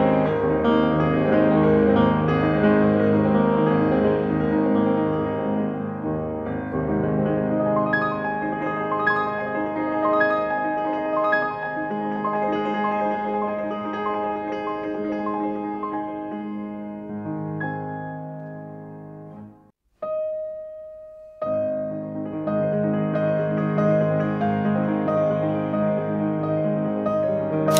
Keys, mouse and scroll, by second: 0.4 scroll up 2, 0.8 scroll down 2, 1.8 scroll down 2, 1.9 scroll up 2, 2.5 scroll down 2, 2.6 scroll up 2, 5.6 Escape, 6.0 t, 6.4 t, 7.0 t, 10.1-10.5 scroll down 2, 10.5-11.1 scroll up 2, 11.1-11.4 scroll up 1, 12.3-13.1 typing, 12.6 scroll up 2, 13.1-13.6 scroll down 4, 13.6 scroll up 2, 13.6 middle click, 14.1 scroll up 2, 15.0 scroll up 2, 15.1 Escape, 15.8 Escape, 15.8-16.9 typing, 17.1 Return, 17.7 scroll down 2, 17.8 scroll up 2, 17.9 middle click, 21.6 BackSpace, 21.9 middle click, 22.3 scroll down 2, 22.4 scroll up 2, 22.6 middle click.